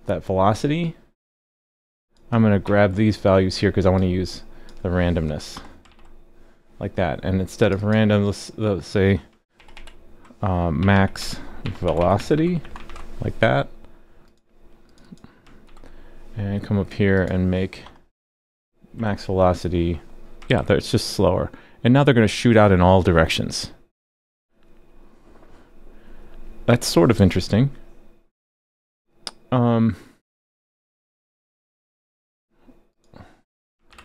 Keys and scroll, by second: 2.6 super+c, 5.9 super+v, 9.6 super+d, 9.7 super+d, 15.6 super+c, 20.5 super+s, 33.9 super+/.